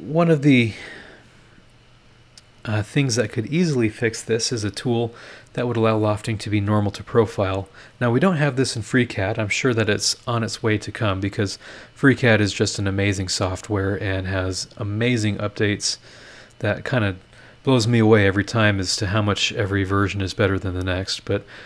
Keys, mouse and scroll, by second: 20.3-20.6 scroll up 2.